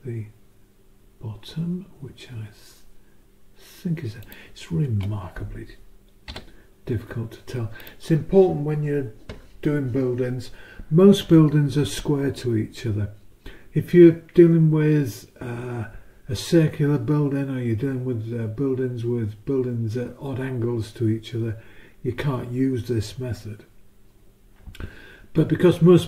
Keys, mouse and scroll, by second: 4.2 click, 6.3 s, 7.8 click.